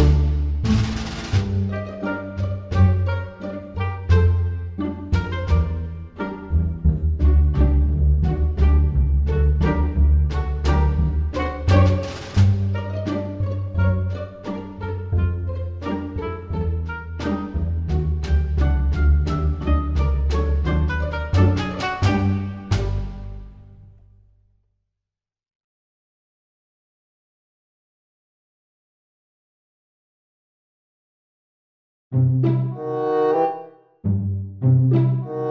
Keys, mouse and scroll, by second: 0.9 click, 4.7 g, 9.1 click, 10.9 g, 13.5 Tab, 14.0 click, 14.3 click, 15.3-15.7 scroll up 3, 15.7 click, 17.4 click, 19.8-20.4 scroll down 3, 20.7 click, 21.4-22.5 scroll up 5, 24.4 click, 26.6 click, 31.2 scroll up 2, 31.6 click, 32.3 click.